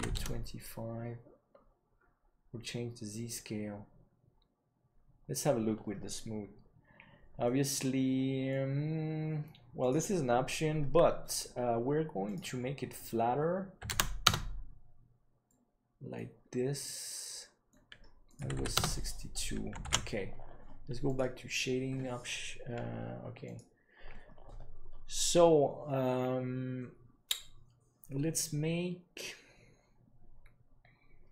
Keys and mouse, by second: 7.3-8.4 middle drag, 12.3-14.4 drag, 15.4-16.0 middle drag, 16.6-17.6 middle drag, 18.2 click, 20.5 ctrl+s.